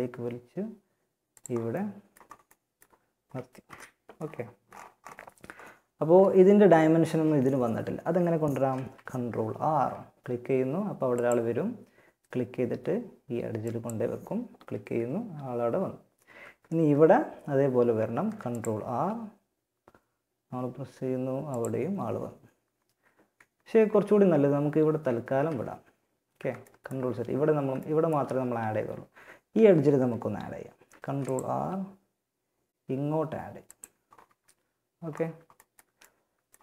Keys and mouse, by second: 2.8 KP_1, 5.2 a, 8.6 ctrl+r, 17.3 ctrl+r, 24.5 ctrl+z, 25.9 click, 28.0 a, 30.0 ctrl+r, 33.7 a.